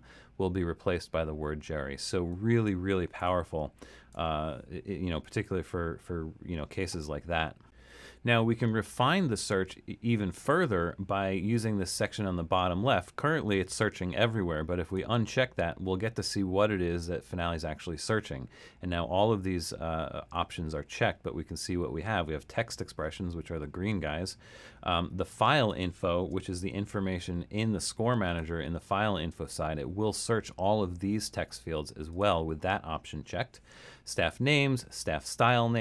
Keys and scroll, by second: 3.3 BackSpace, 4.1 BackSpace, 26.5 super+k.